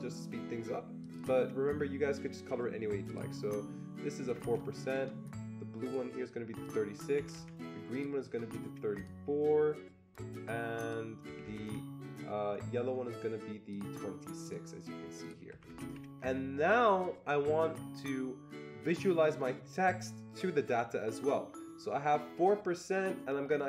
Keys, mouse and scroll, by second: 1.0 click, 1.2 double click, 3.1 click, 4.3 Escape, 4.4 Escape, 4.9 click, 5.8 click, 6.6 click, 7.3 Escape, 7.9 click, 8.9 click, 10.8 click, 11.3 Escape, 11.4 Escape, 11.6 Escape, 13.7 click, 14.2 click, 14.4 click, 15.5 click, 15.7 Escape, 15.8-18.2 Escape.